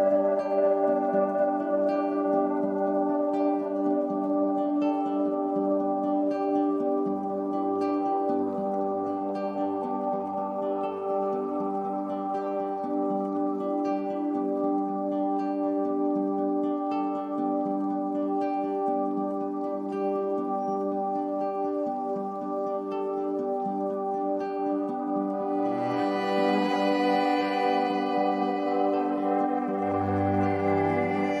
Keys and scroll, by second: 2.8 super+c, 3.0 super+f, 3.6 shift+Down.